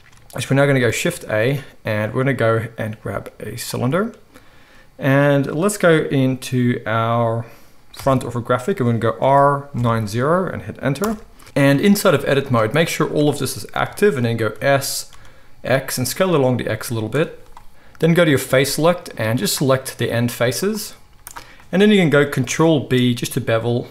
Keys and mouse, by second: 0.9 shift+a, 7.9 KP_1, 9.1 r, 12.1 z, 14.5 s, 17.1-18.1 middle drag, 18.1-19.4 drag, 19.4-20.5 middle drag, 20.5 shift+click, 20.6-23.9 shift+middle drag, 21.0 z, 22.4 ctrl+b.